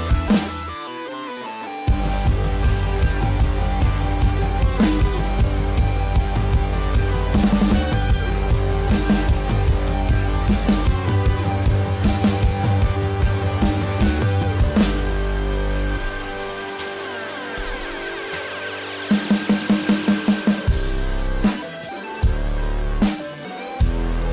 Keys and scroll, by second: 23.3 ctrl+=, 23.5 ctrl+-.